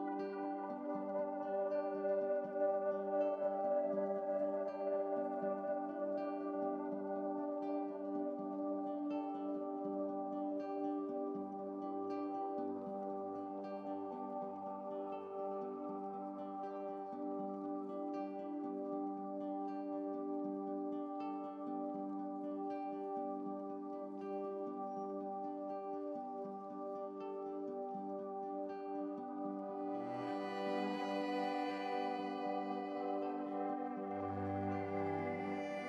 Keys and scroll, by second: 0.5 ctrl+shift+z.